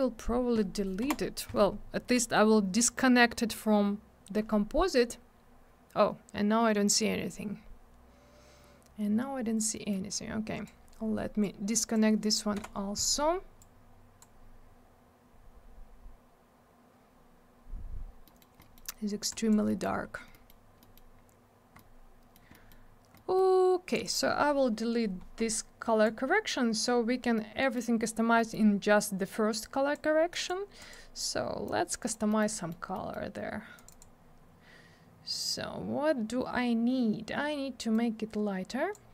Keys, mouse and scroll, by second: 1.0 Delete, 9.8 middle click, 9.9 middle click, 10.1 click, 11.4 click, 12.6 Delete, 13.6 click, 18.3 middle click, 18.4 middle click, 18.6 middle click, 18.8 double middle click, 19.3 click, 19.7 middle click, 19.8 middle click, 20.1 scroll down 1, 20.3 middle click, 20.5 middle click, 20.8 middle click, 21.0 middle click, 21.2 scroll up 1, 21.8 middle click, 22.5 middle click, 22.7 middle click, 23.2 middle click, 23.9 click, 24.0 click, 26.0 click, 27.4 middle click, 28.4 middle click, 28.5 middle click, 28.6-29.2 scroll down 1, 29.3 click, 30.3 click, 30.5 click, 30.8 click, 30.9 double click, 31.7 click, 32.3 middle click, 32.4 middle click, 32.6 middle click, 32.7 double middle click, 32.9 middle click, 33.1 middle click, 33.8 click, 33.9 click, 33.9 click, 34.0 click, 37.9 click.